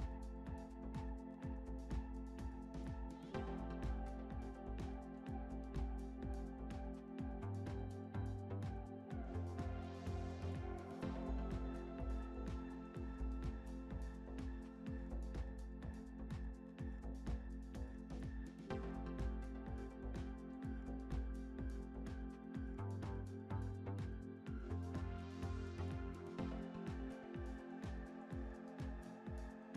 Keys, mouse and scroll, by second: 0.7 click, 1.3-2.2 scroll down 5, 2.2 scroll down 1, 2.2-3.7 middle drag, 3.7 click, 4.1-4.5 scroll up 5, 4.5-5.0 middle drag, 5.0 scroll up 1, 5.7 s, 7.2 click, 8.4 Tab, 8.7-9.4 scroll up 6, 9.4 middle click, 10.2 3, 14.4 click, 16.6 ctrl+r, 19.1 s, 23.4 middle click, 24.3 2, 24.7 click, 24.8 click, 25.9 click, 29.2-29.7 drag.